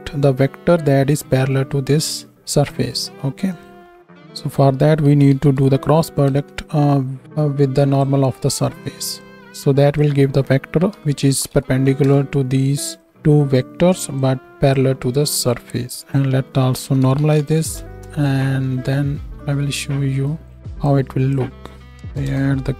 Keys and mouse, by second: 4.0-7.9 drag, 4.7 BackSpace, 4.9 BackSpace, 5.1 BackSpace, 6.9 o, 8.7-12.9 drag, 13.1-22.4 right drag, 14.1-18.0 drag, 14.1-18.0 middle drag, 20.4 click, 20.4 middle click, 20.8-22.4 drag, 20.8-22.4 middle drag, 22.0 BackSpace, 22.2 BackSpace.